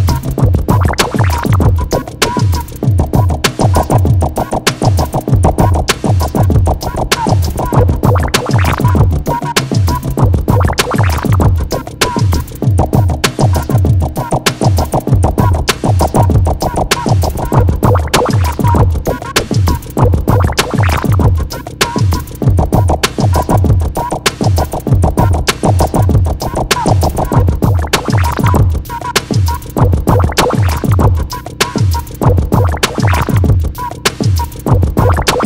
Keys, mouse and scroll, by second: 2.5 KP_2, 3.6 KP_Enter, 6.8 click, 7.5-8.0 scroll down 1, 8.2-9.0 typing, 10.2-11.0 scroll down 1, 11.4 middle click, 16.2 click, 22.9 right click, 24.8 click, 27.9 click, 31.0-31.4 scroll up 1, 32.6 click, 34.7 3.